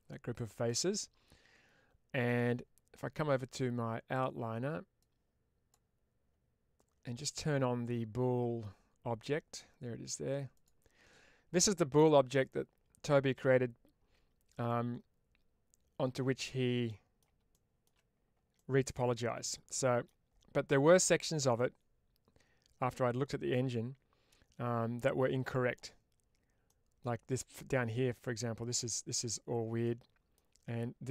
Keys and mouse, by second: 0.0 shift+middle click, 0.5-2.1 middle drag, 3.5 click, 4.9 click, 10.4 click, 11.9-16.0 middle drag, 16.7 middle click, 17.4 shift+middle click, 18.4-20.2 middle drag, 20.5 middle click, 21.5-25.6 middle drag, 26.5 middle click, 29.7 middle click.